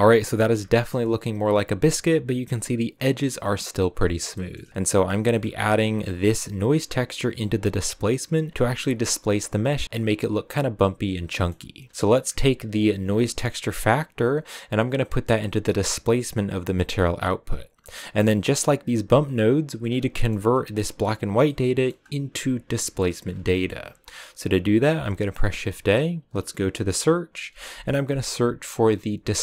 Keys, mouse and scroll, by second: 0.6-5.5 shift+middle drag, 5.5-6.6 scroll down 7, 6.6 click, 17.0 click, 18.2-18.7 scroll up 5, 18.7 click.